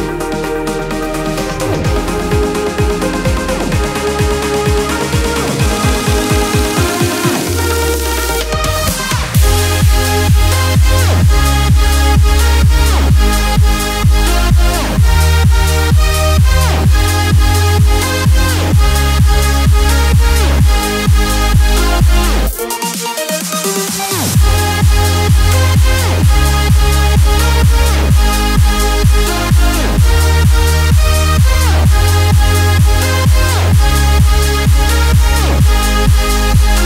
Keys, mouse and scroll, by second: 7.3 ctrl+click, 10.0 click, 12.3 click, 12.6 click, 18.7 click, 18.8 click, 19.2 space, 20.2-25.1 drag, 25.1-33.5 alt+shift+drag, 34.8-35.2 alt+scroll up 1, 35.4 space, 35.6 click, 36.0 space.